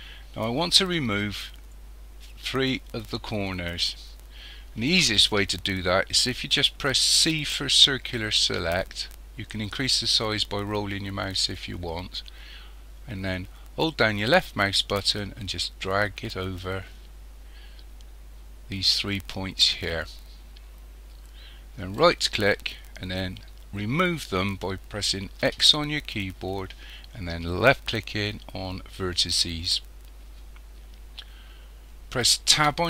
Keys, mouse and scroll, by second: 7.2 c, 25.4 x, 32.6 Tab.